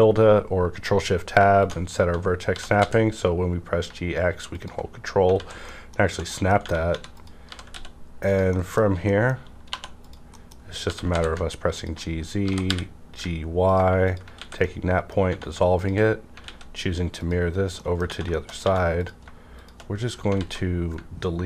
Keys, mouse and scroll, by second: 1.2 shift+Left, 1.6 shift+Left, 1.6 click, 2.4-2.8 typing, 4.5 ctrl+click, 4.5 ctrl+click, 4.9 scroll down 1, 5.3 alt+z, 5.6 middle click, 6.0 scroll down 1, 6.3 middle click, 6.8-7.7 typing, 7.1 click, 7.6 click, 8.3 click, 8.5 middle click, 8.8-9.3 scroll up 2, 9.0 middle click, 9.6 2, 10.0 click, 10.3 middle click, 10.8 typing, 11.7 ctrl+click, 12.4 typing, 13.7 ctrl+click, 14.4 ctrl+x, 14.6 middle click, 15.2 scroll down 1, 15.3 Tab, 15.7 shift+click, 16.1 scroll down 1, 16.4 alt+x, 17.2 click, 17.7 middle click, 18.0 Tab, 18.3 shift+middle click, 18.6 1, 18.9 click, 19.6 click, 20.3 alt+z.